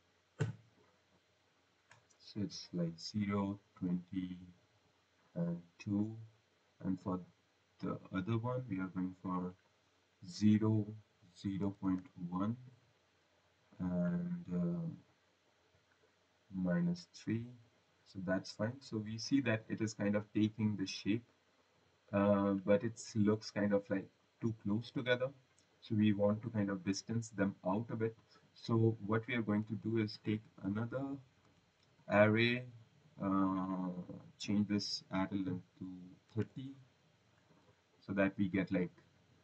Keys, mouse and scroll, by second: 2.1 click, 3.6 typing, 4.8-5.3 typing, 5.1 click, 10.3 click, 11.6-13.3 typing, 18.0 click, 24.6 click, 27.9 click, 28.3-28.9 scroll, 29.6 click, 30.5 ctrl+c, 31.4 v, 31.9 click, 32.5 click, 34.1 click, 36.1-36.8 typing.